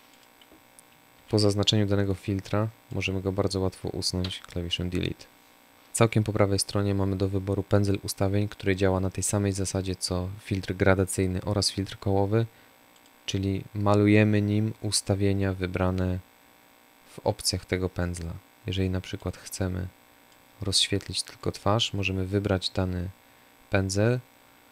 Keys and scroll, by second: 0.1 Delete, 3.2 Delete.